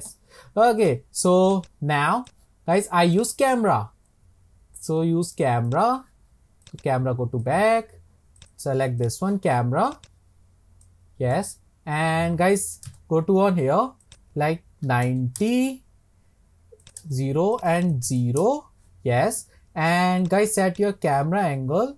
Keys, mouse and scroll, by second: 0.4 scroll up 2, 0.8 click, 1.5 click, 1.6 click, 2.2 click, 3.2-6.2 drag, 6.6 click, 8.4 click, 9.0 click, 9.9 click, 10.0 click, 14.1-17.7 drag, 17.8-21.9 drag.